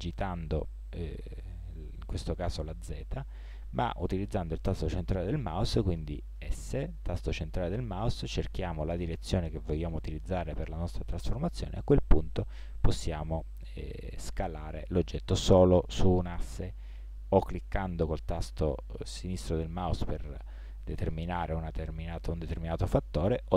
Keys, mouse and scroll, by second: 6.4 s.